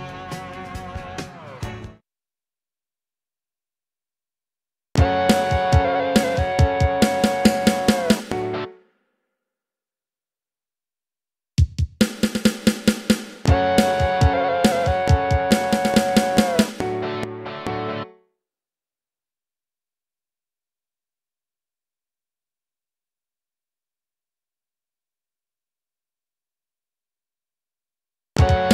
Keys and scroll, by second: 1.7 space, 4.8 space, 8.6 space, 10.6 Delete, 13.3 space, 13.8 F7, 18.0 space, 28.2 space.